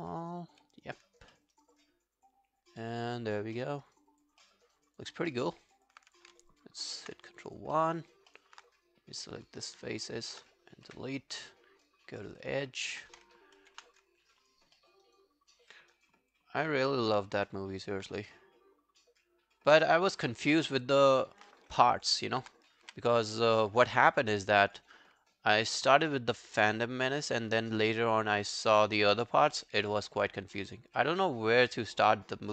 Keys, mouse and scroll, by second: 1.4 alt+middle click, 1.6 alt+right click, 1.8 alt+click, 3.6 alt+middle click, 3.9 alt+right click, 4.1 alt+click, 4.5 alt+middle click, 4.7 alt+right click, 4.9 alt+click, 5.3 alt+middle click, 5.5 alt+right click, 5.8 alt+click, 7.3 alt+click, 7.8 alt+middle click, 8.0 alt+right click, 8.3 alt+middle click, 8.7 right click, 10.1 shift+click, 10.2 shift+click, 10.9 Delete, 11.2 right click, 12.4 double click, 12.7 alt+click, 14.0 ctrl+scroll down 1, 14.2 alt+click, 14.8 alt+middle click, 15.1 alt+right click, 15.4 alt+click, 15.8 alt+middle click, 16.0 alt+right click, 16.2 alt+click, 16.7 alt+click, 21.5 alt+middle click, 22.1 alt+click, 22.9 w, 23.2 right click, 31.0 alt+middle click.